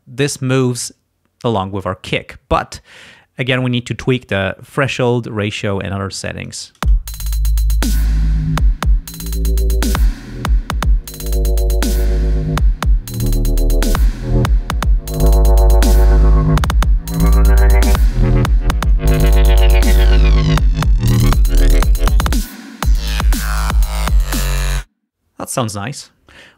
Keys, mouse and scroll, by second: 6.0-7.0 drag, 7.1 space, 7.9 click, 9.5 click, 11.1 click, 13.5-14.5 drag, 15.5 click, 16.1 click, 17.7 click, 18.7 click, 19.5 click, 24.9 space.